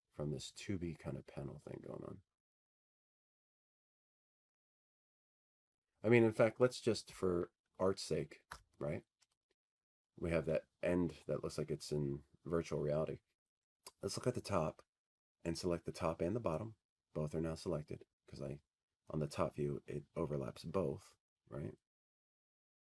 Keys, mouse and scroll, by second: 14.1 Escape, 15.0 click, 22.2 click.